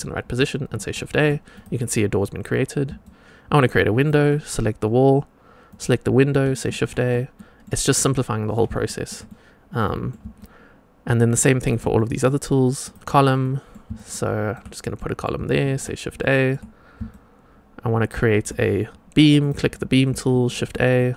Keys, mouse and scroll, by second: 0.8 shift+a, 1.4 click, 2.9-3.6 shift+right drag, 3.9 click, 5.6 click, 6.7 shift+a, 7.3 middle click, 8.8 shift+middle click, 9.2-10.0 middle drag, 10.3 shift+right click, 10.3-11.6 shift+drag, 11.9 middle drag, 12.8 click, 13.3 middle drag, 13.9-14.5 shift+drag, 13.9 shift+right click, 14.9 middle click, 15.6 shift+a, 16.1-16.4 shift+middle drag, 17.0-18.4 shift+right drag, 19.3 click, 20.2 shift+a, 20.9-21.1 middle drag.